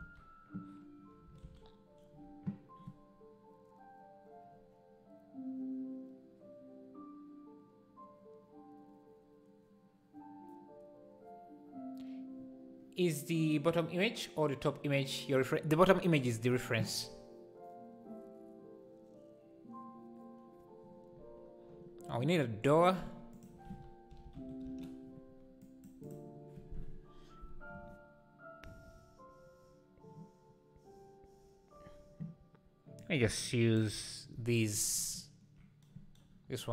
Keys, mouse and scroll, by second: 0.0 alt+a, 24.8 o, 26.1-33.8 drag.